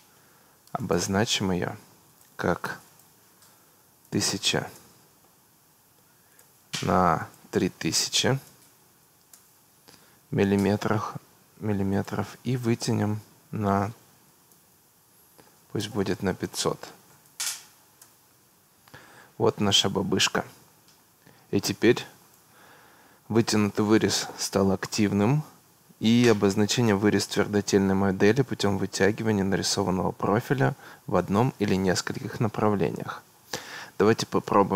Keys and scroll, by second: 3.8 1, 4.0 0, 4.8 Return, 8.0 3, 9.3 Return, 14.3 1, 14.5 0, 15.8 BackSpace, 17.1 5, 17.3 0, 18.0 Return.